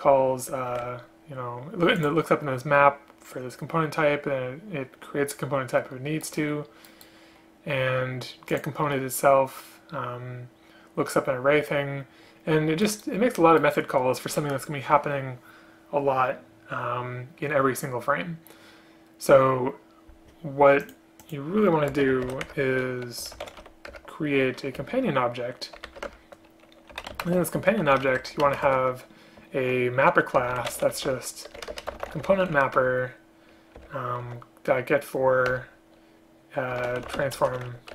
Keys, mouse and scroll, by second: 0.8 ctrl+q, 8.7 ctrl+click, 22.0 space, 22.5 Return, 24.0 Return, 24.9 space, 26.2 Return, 27.3 space, 28.5 space, 28.7 space, 31.7 BackSpace, 31.8 BackSpace, 32.9 Return, 35.6 Return.